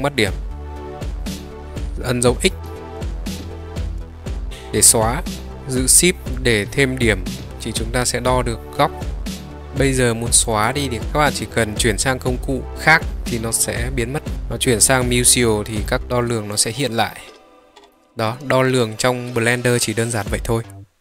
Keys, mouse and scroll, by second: 1.1 middle drag, 3.6 x, 6.3-9.4 shift+drag, 10.4 click, 13.4-14.3 middle drag, 16.6-18.4 middle drag.